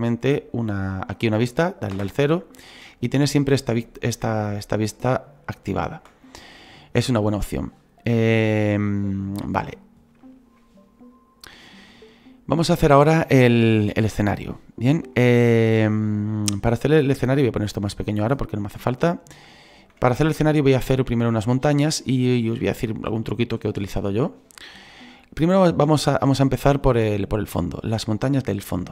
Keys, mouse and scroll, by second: 2.1 KP_0, 11.5-17.9 middle drag, 17.9 click, 18.8-28.9 middle drag.